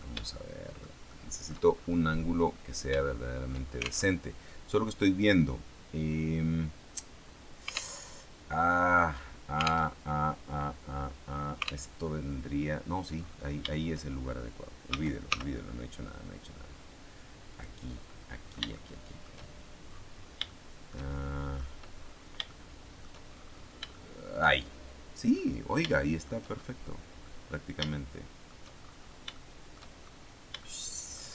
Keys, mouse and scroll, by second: 1.9-2.9 shift+scroll up 1, 3.0 shift+click, 4.0 alt+shift+Tab, 7.9 alt+Tab, 8.5-9.6 scroll down 2, 9.9 alt+Tab, 11.8 alt+Tab, 14.8 s, 15.2 y, 17.4 click, 18.0-19.3 middle drag, 19.8-20.4 scroll down 3, 20.4-21.7 shift+middle drag, 21.9-22.3 scroll up 2, 22.4 shift+middle click, 25.3-26.3 middle drag, 26.3-26.9 shift+scroll up 3, 26.9 scroll down 2, 27.1-28.5 middle drag, 28.5-29.3 shift+scroll up 4, 29.3 shift+middle click, 30.1-30.5 shift+scroll up 2, 30.5 shift+middle click.